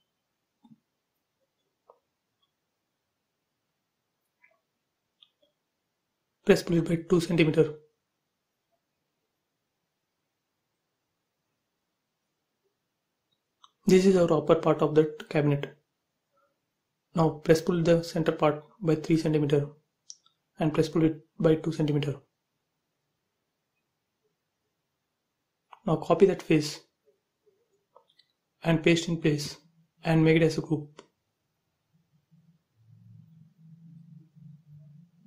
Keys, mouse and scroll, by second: 0.0 space, 0.1 click, 2.9 right click, 3.7 click, 5.0-7.0 typing, 5.1 click, 8.4 click, 10.0-11.8 middle drag, 11.8 click, 12.1 space, 12.4 middle click, 12.8 scroll down 1, 13.1 click, 13.4 scroll up 1, 13.8 middle click, 14.0 click, 15.0-17.3 typing, 15.3 click, 17.5 click, 18.2 ctrl+c, 18.8 p, 19.4 space, 20.3 p, 20.4 click, 22.7-24.4 typing, 24.5 click, 25.3 ctrl+c, 25.4 space, 25.9 click, 28.3-29.7 middle drag, 29.7 m, 29.8 click, 31.2 Left, 31.6-33.3 typing, 33.5 middle click, 34.5 right click.